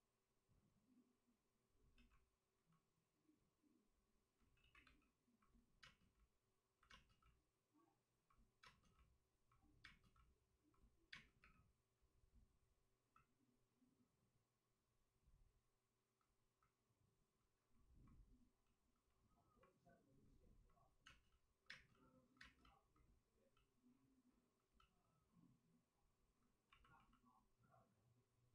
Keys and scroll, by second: 1.9 2, 4.3 ctrl+z, 4.7 ctrl+z, 4.7 2, 5.7 space, 10.5 space, 11.0 space, 11.3 3, 16.8 3, 21.0 space, 21.6 space, 24.7 space, 26.8 space, 26.9 space.